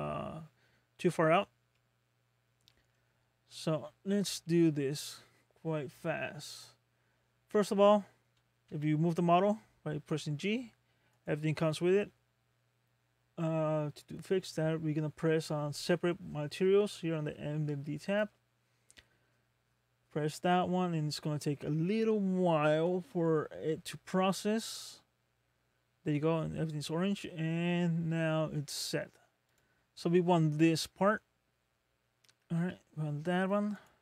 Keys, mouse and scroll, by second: 0.0 middle click, 1.3 scroll down 2, 1.7 middle click, 2.5-3.0 scroll down 2, 3.3-3.6 shift+scroll up 2, 4.0-4.4 scroll up 2, 4.5 middle click, 8.6 g, 18.1 click, 27.1 middle click, 29.5 click, 30.7 middle click, 32.5 g, 32.7 g.